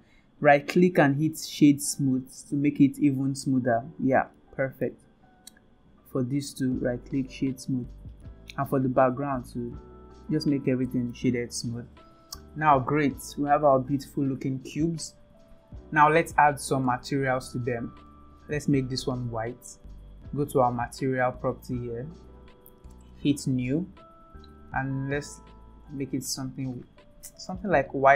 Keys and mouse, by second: 0.4-1.8 right drag, 2.8 right click, 4.4-4.8 middle drag, 5.4-6.0 right drag, 6.7 right click, 8.2-8.6 middle drag, 9.4 right click, 11.5 ctrl+s, 18.1 middle drag, 18.4 click, 21.8 click, 23.5-23.8 drag.